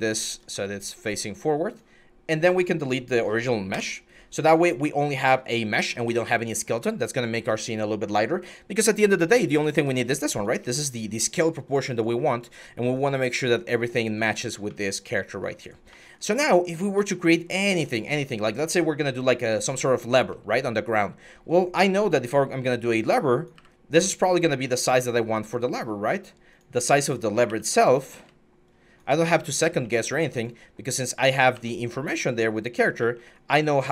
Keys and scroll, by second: 0.3 w, 3.5 Delete, 21.9 e, 23.4 w, 27.3-29.6 typing, 31.3 w, 32.6 w.